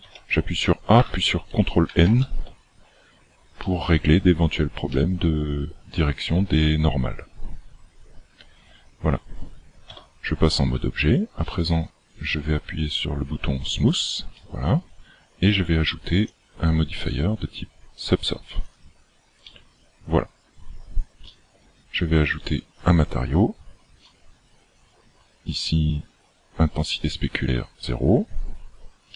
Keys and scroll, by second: 0.0 a, 1.9 ctrl+n, 9.8 Tab.